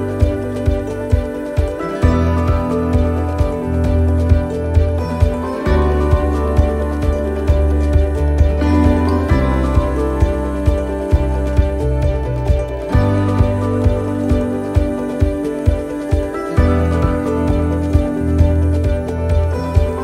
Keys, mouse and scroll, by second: 0.2 shift+d, 1.9 click, 7.9 click, 10.3 click, 14.1 click, 18.2 middle click.